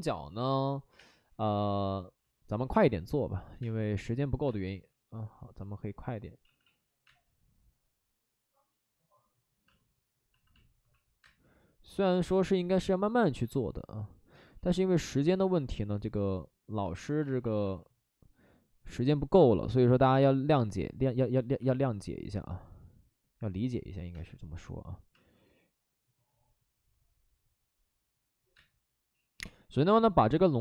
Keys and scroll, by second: 0.8 space, 0.8 1, 2.5 ctrl+z, 2.7 space, 3.2 space, 3.3 space, 4.6 ctrl+z, 6.4 ctrl+z, 6.6 ctrl+z, 7.0 space, 9.6 space, 10.7 alt+s, 11.2 space, 12.2 space, 13.3 ctrl+z, 14.3 space, 14.6 ctrl+z, 17.2 space, 17.4 ctrl+z, 21.6 space, 24.1 space, 25.1 space, 28.5 space.